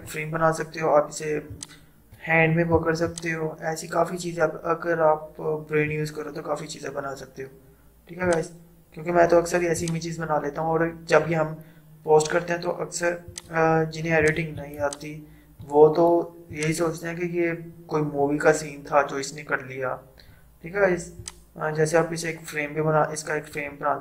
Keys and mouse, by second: 1.5-8.3 drag, 8.3-13.6 drag, 13.6-24.0 drag.